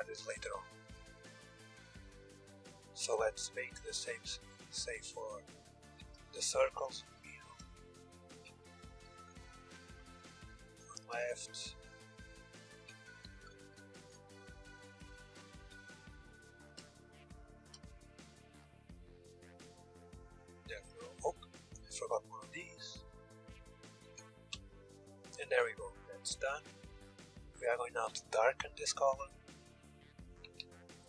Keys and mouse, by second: 2.5 Tab, 2.5-4.4 drag, 8.6 ctrl+l, 12.9 ctrl+z, 13.4 ctrl+l, 15.1 Tab, 15.5 click, 16.4-20.4 drag, 20.4-22.7 middle drag, 22.2 Tab, 23.5 ctrl+l, 23.9 Tab, 25.0-26.9 middle drag, 27.6-29.6 drag, 28.6 Tab, 30.0 Tab, 30.5-31.0 drag.